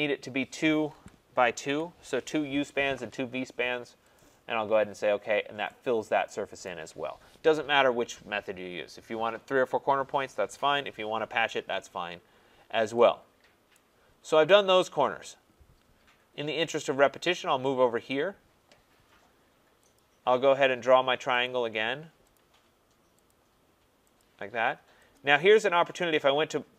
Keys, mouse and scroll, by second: 0.9 2, 1.5 Tab, 1.6 2, 1.8 Tab, 4.1 click, 5.3 scroll, 6.6 right click, 6.6 scroll, 11.6-12.7 scroll, 13.7 right click, 15.4-15.7 scroll, 16.1-18.1 scroll, 20.0 click, 20.0-20.6 scroll, 21.4 click, 22.3 click, 23.3 click, 24.2 click, 25.2 click.